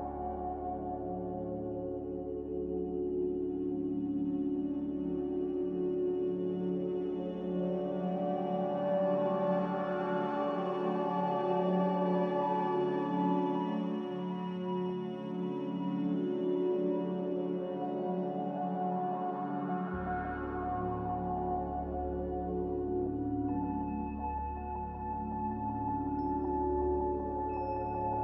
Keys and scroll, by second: 1.8 Delete, 5.9 Delete, 6.7 ctrl+z, 9.7-10.4 typing, 15.1 Delete, 17.5 Delete, 19.4 s, 23.5-25.5 typing, 24.7 Tab.